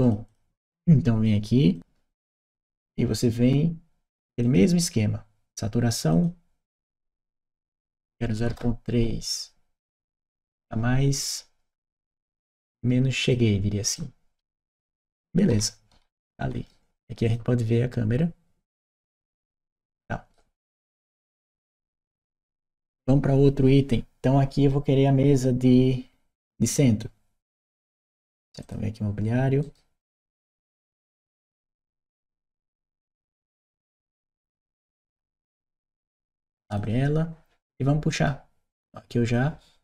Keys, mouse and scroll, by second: 0.1 click, 1.5 click, 4.2 click, 5.9 click, 6.5 click, 7.6 q, 8.3 a, 12.0 Return, 13.0 click, 13.8-16.5 right drag, 14.3 w, 14.7 s, 15.4 w, 15.8 s, 17.1 click, 19.4 right click, 21.2 click, 21.5 right click, 22.0 w, 28.5 click, 29.5 right click, 30.8 click, 32.5 e, 32.9 a, 33.7 c, 34.1 t, 36.1 Return, 36.5 click, 37.9-39.1 drag.